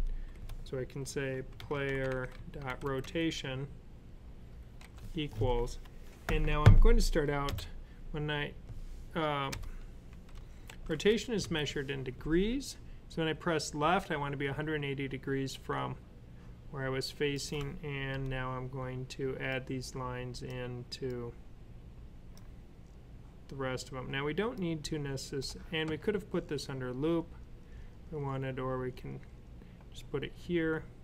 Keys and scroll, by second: 1.2-2.9 typing, 4.7 typing, 7.1-7.8 typing, 9.9-11.3 typing.